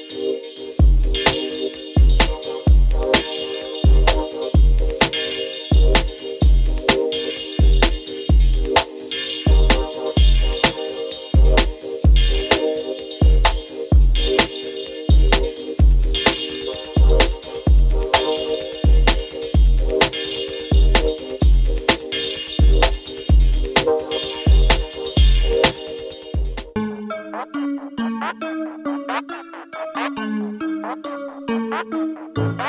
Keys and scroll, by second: 10.3 ctrl+F12, 17.3 ctrl+F11, 24.2 space, 25.0 space, 25.6 space, 26.7 space.